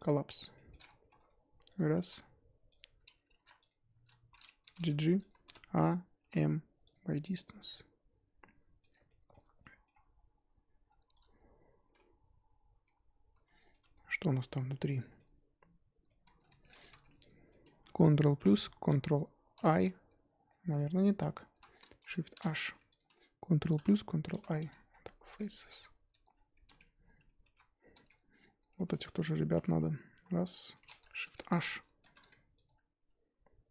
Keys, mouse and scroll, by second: 0.0 m, 0.3 scroll down 2, 0.5 middle click, 1.0 1, 1.2 scroll up 2, 1.7 click, 2.0 z, 2.7 shift+click, 3.3 ctrl+z, 3.6 shift+click, 4.2 z, 4.7 g, 5.4 a, 6.9 m, 7.4-9.9 middle drag, 9.9-10.8 scroll up 2, 10.8-11.2 scroll down 2, 11.2 click, 11.9 l, 12.8 l, 13.8 h, 15.1-16.3 middle drag, 16.3 ctrl+z, 16.8 3, 17.2 alt+click, 17.5 middle click, 18.3 ctrl+KP_Add, 19.5 ctrl+i, 20.8 click, 21.5 l, 22.0 shift+h, 22.9 alt+click, 23.7 ctrl+KP_Add, 24.3 ctrl+i, 25.3 x, 25.7 Tab, 26.3 scroll down 3, 26.6 Tab, 27.4 alt+h, 27.7-28.4 scroll up 5, 28.4-29.1 scroll down 1, 29.1 click, 30.1 l, 31.2 shift+h, 32.6 alt+click, 33.3-33.7 scroll up 1.